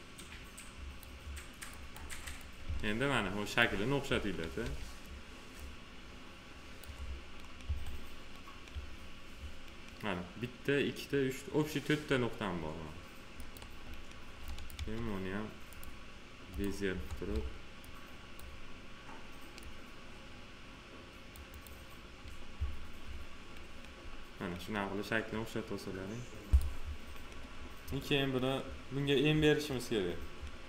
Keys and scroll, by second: 2.6 s, 4.5 s, 7.6 1, 14.7 F3, 16.8 F3, 22.5 1.